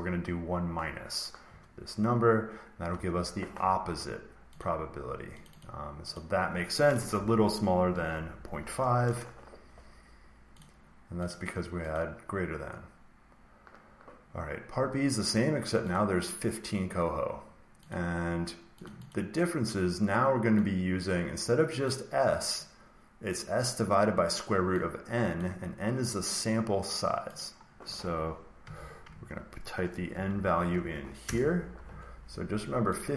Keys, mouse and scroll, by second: 2.8 Return, 4.5 click, 5.4 click, 5.5 click, 6.0 click, 7.0-8.1 typing, 8.9 Return, 10.5-13.9 drag, 15.8-18.0 drag, 18.8 click, 19.1 click, 21.7 click, 25.3 click, 27.3 click, 28.3-30.5 typing, 28.6 click, 31.1 Return, 32.9 click.